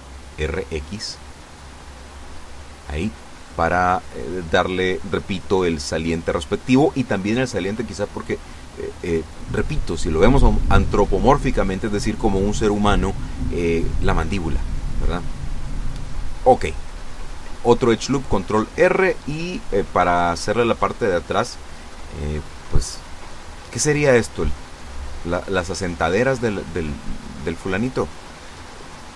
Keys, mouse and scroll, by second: 0.1 x, 2.5 click, 10.1 ctrl+r, 10.8 click, 12.9 click, 13.8 a, 15.1 b, 15.4 click, 17.4-21.5 drag, 22.0-23.4 drag, 24.9 ctrl+r, 25.4 ctrl+click, 27.2 click, 28.0 a.